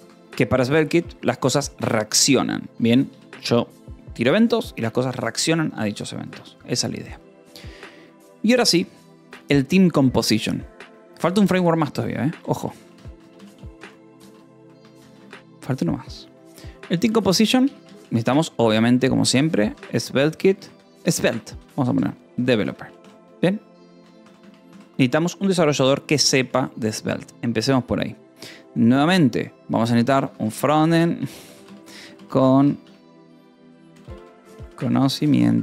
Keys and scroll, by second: 0.0-0.4 typing, 2.7 o, 3.0 Return, 11.8-15.4 typing, 15.1 Escape, 17.1-25.0 typing, 23.5 ctrl+s, 24.3 Escape, 26.2 :, 26.4 space, 30.1-35.6 typing, 33.4 Right.